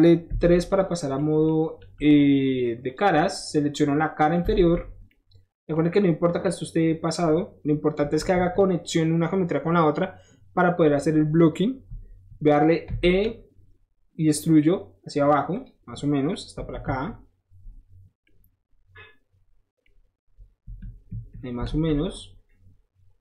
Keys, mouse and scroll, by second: 0.4 3, 0.7 click, 1.0 middle click, 1.2 middle click, 1.9 middle click, 2.9 click, 3.7 middle click, 4.5 alt+z, 5.2 middle click, 6.5 middle click, 8.0 middle click, 8.1 KP_1, 8.3 KP_3, 13.0 e, 15.6 click, 16.7 KP_1, 16.8 KP_3, 17.9 middle click, 19.9 middle click, 20.8 KP_1, 21.1 KP_3, 21.7 z.